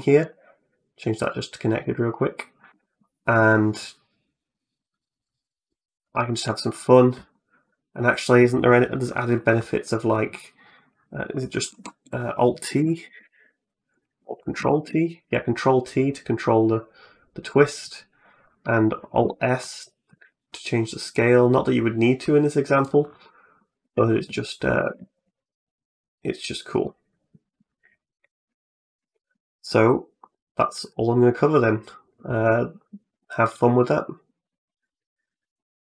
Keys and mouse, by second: 1.1 click, 2.5 g, 6.6 right click, 7.1 middle click, 9.7 right click, 11.5 t, 12.9 alt+t, 14.4 ctrl+t, 18.3 right click, 19.0 alt+s, 23.0 middle click, 23.6 Tab, 24.1 middle click, 24.8 a, 25.0-26.7 middle drag, 27.7 right click, 28.4 shift+right click.